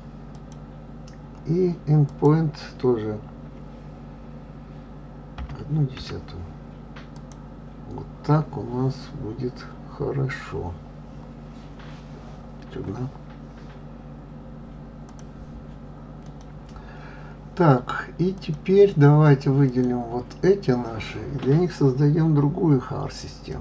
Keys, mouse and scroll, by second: 2.6-5.6 drag, 11.0-11.7 scroll down 4, 11.7-12.1 scroll up 4, 19.2 click, 20.5 click.